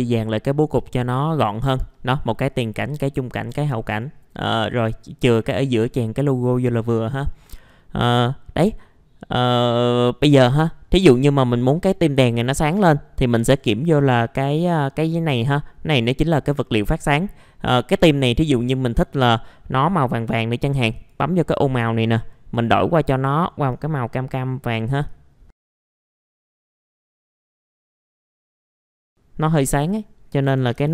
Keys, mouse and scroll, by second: 20.9-28.9 drag, 28.9 KP_3, 29.5 click, 30.5 KP_0, 30.7 KP_Decimal, 30.8 KP_5.